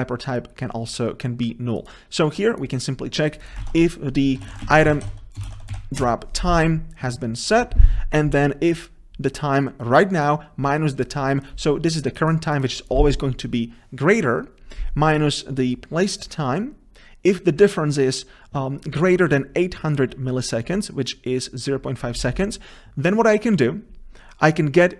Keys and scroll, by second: 3.9 shift+F6.